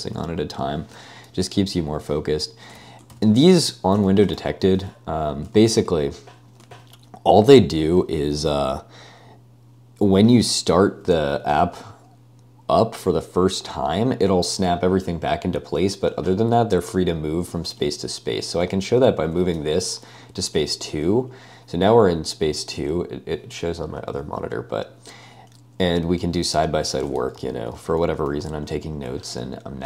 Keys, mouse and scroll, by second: 2.8-4.3 typing, 3.1 ctrl+k, 3.6 Escape, 5.6 Escape, 6.1 ctrl+u, 6.7 ctrl+u, 18.5 €, 18.9 ™, 27.3 ctrl+d, 27.4 ctrl+d, 27.9 ctrl+d, 28.3 ctrl+d, 28.3 g.